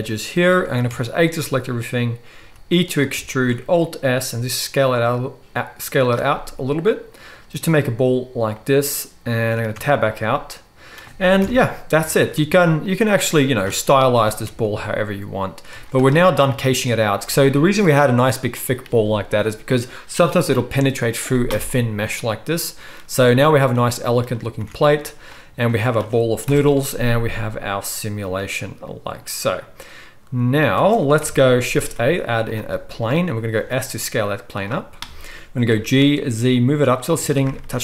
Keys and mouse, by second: 0.9 a, 2.5 e, 3.3 alt+s, 9.8 Tab, 11.4 KP_1, 12.0 Tab, 12.2 z, 12.8-15.7 drag, 14.1 g, 15.7-30.8 middle drag, 15.7 z, 24.6 Tab, 26.5 shift+Left, 26.7 space, 30.8 space, 31.2 KP_1, 31.8 shift+a, 33.5 s, 35.7 g.